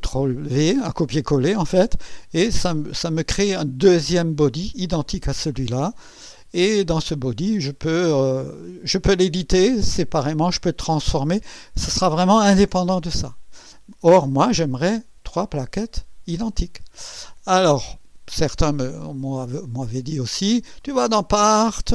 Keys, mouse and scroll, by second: 19.2 click, 20.8 click.